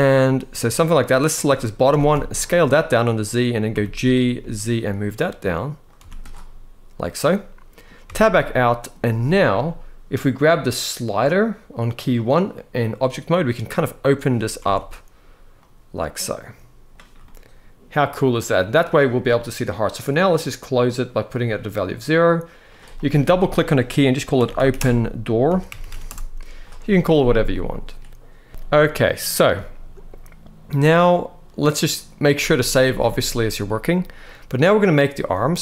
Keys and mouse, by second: 0.6 click, 1.6 s, 1.8 z, 2.9 click, 3.4 g, 4.1 z, 5.5 click, 5.7 z, 6.9 middle click, 7.7 Tab, 8.2 middle click, 12.2-13.9 drag, 14.3 alt+a, 15.2-16.5 drag, 16.9-18.6 middle drag, 19.6-20.9 drag, 22.3 click, 22.5-25.8 drag, 25.5 o, 27.2 middle click, 28.5 ctrl+s, 28.5 KP_1, 29.3 shift+middle click, 32.3 ctrl+s, 32.6 ctrl+s, 32.7 ctrl+s, 33.4 shift+middle click, 35.3 click.